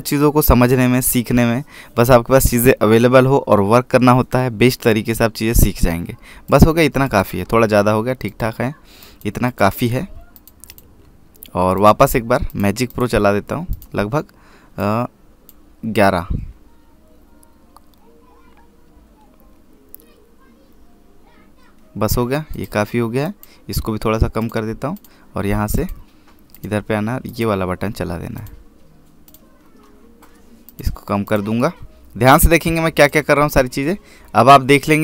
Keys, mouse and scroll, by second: 7.3 click, 23.4 click.